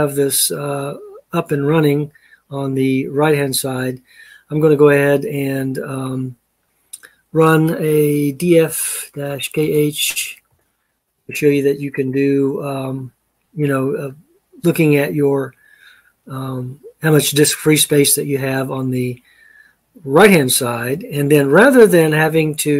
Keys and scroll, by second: 8.0-10.2 typing.